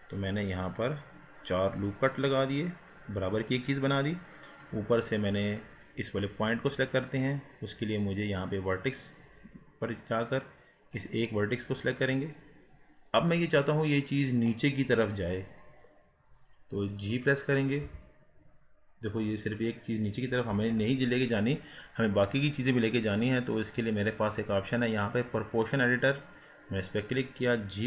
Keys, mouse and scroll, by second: 2.1 click, 2.9-5.0 middle drag, 5.0-5.5 scroll up 4, 5.5-8.5 middle drag, 8.5-10.1 drag, 10.1 scroll up 2, 10.9 click, 11.7-12.4 scroll down 1, 12.4-13.4 middle drag, 13.4-13.9 scroll down 4, 14.0-17.9 middle drag, 17.9 g, 20.5 ctrl+z, 26.0 click.